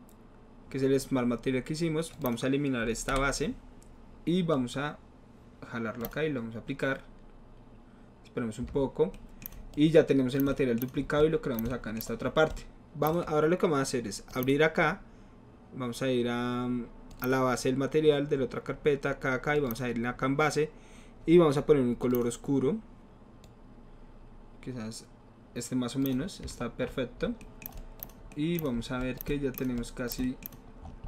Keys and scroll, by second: 3.1 Delete.